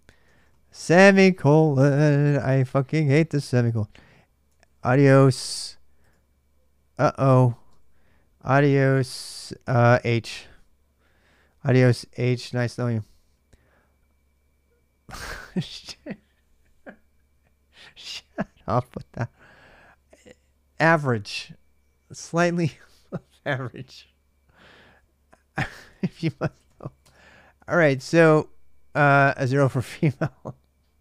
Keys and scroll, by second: 0.0-1.5 typing, 2.1 Return, 3.3-5.1 typing, 5.8 Return, 9.8 h, 10.1 Return, 25.3-27.1 typing, 27.5 ctrl+a, 27.6 ctrl+a.